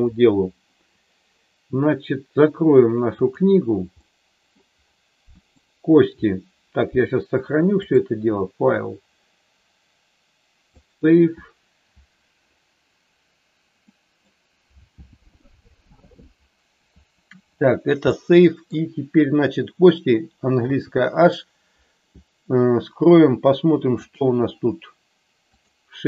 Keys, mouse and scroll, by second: 3.3 click, 3.9 middle click, 5.5 click, 13.7 middle click, 18.0 middle click, 20.8 h, 24.3 click.